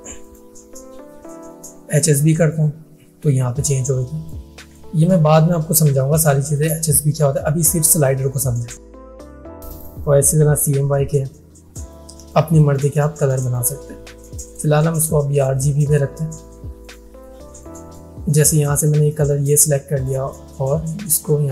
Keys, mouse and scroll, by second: 0.3 click, 2.4-4.6 drag, 8.9 click, 14.5 right click, 14.5 right click, 15.0-19.7 drag.